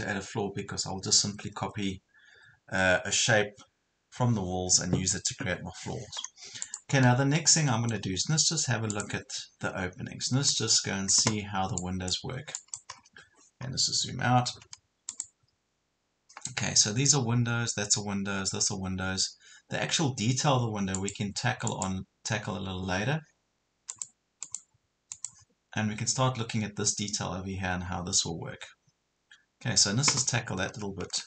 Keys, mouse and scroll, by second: 6.7 click, 7.1 scroll down 1, 7.5 middle click, 8.9-12.6 drag, 12.9 scroll down 1, 15.1 click.